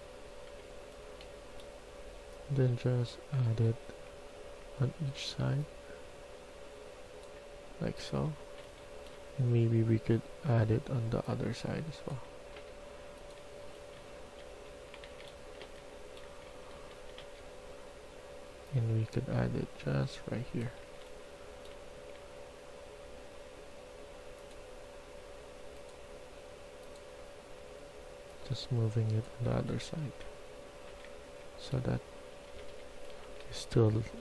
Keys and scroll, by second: 0.0-1.0 typing, 8.2-8.7 typing, 13.2-17.7 typing, 19.0-22.0 typing, 29.4-31.7 typing, 32.4 Escape, 32.6 Escape, 32.9-33.8 typing.